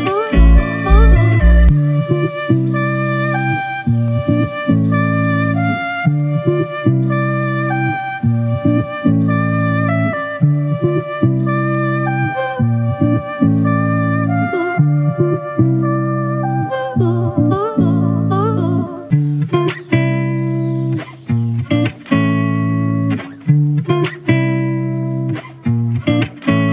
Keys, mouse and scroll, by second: 4.7 double click, 15.0 double click.